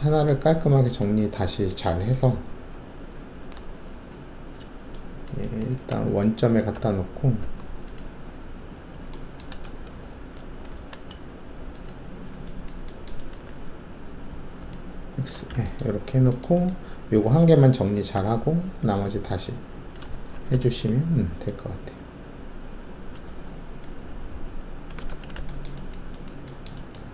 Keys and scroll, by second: 3.9 alt+shift+a, 5.9 alt+`, 6.7 alt+`, 7.4 alt+`, 9.6 alt+shift+a, 10.3 alt+shift+a, 10.7 alt+shift+a, 14.6 alt+x, 15.1-15.6 typing, 18.1 alt+3, 20.1 ctrl+`, 23.2 ctrl+`, 25.1 ctrl+`.